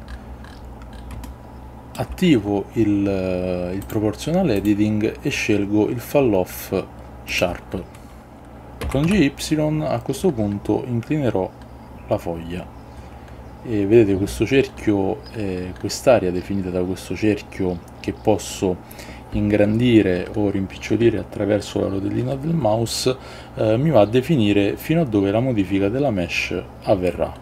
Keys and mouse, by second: 1.4 shift+middle click, 3.9-8.5 drag, 7.7 ctrl+z, 8.9 g, 9.2 y.